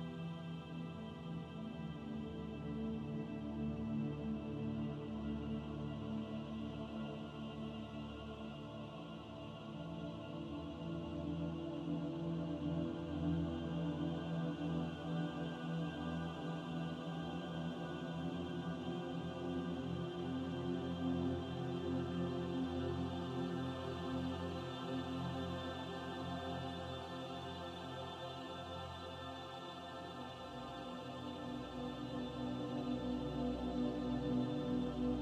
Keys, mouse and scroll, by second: 0.0-0.6 scroll down 1, 1.2 shift+a, 6.4 scroll down 1, 7.9 scroll down 1, 7.9 s, 11.0 click, 14.9 middle click, 19.5 KP_7, 22.6 click, 24.5 click, 26.5 s, 29.0 s, 32.6 click, 33.6 middle click.